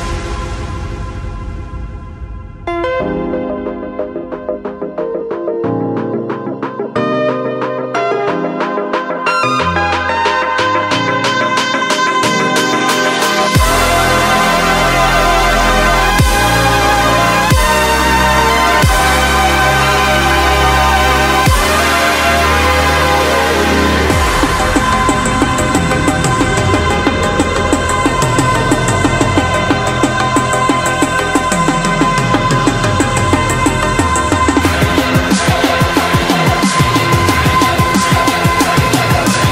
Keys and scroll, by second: 10.3 ctrl+z, 10.8 ctrl+z, 11.2 ctrl+z, 11.9 ctrl+z, 12.2 ctrl+z.